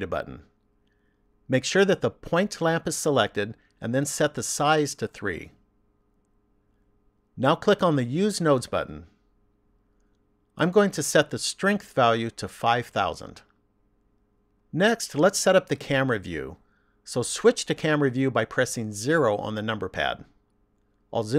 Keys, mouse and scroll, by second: 0.0 click, 3.9 click, 8.9 click, 10.5 click, 12.5 KP_0, 19.5 KP_0.